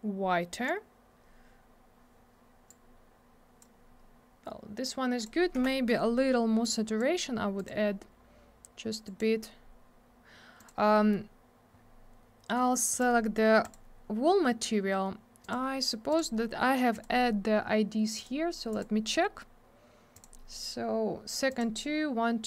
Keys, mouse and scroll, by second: 2.7 click, 5.2 click, 5.2 click, 5.6 m, 6.6 click, 7.6 click, 7.7 click, 9.0 click, 9.2 click, 10.6 click, 10.7 click, 10.9 middle click, 11.1 double middle click, 11.7-12.9 scroll down 1, 12.9 click, 13.0 click, 13.6 click, 13.7 click, 15.4 click, 15.5 click, 16.1 click, 16.2 click, 16.9 click, 17.0 click, 18.2 click, 18.2 click, 18.7 click, 18.8 click, 20.1 click, 20.2 click, 21.5 click, 21.6 click.